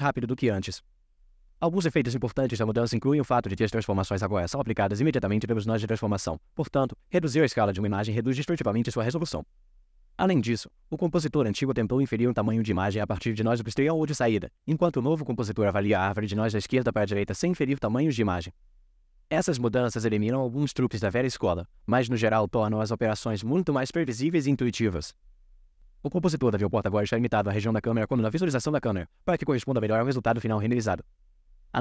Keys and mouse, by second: 26.7-29.0 drag, 29.5-30.5 drag, 31.0 click.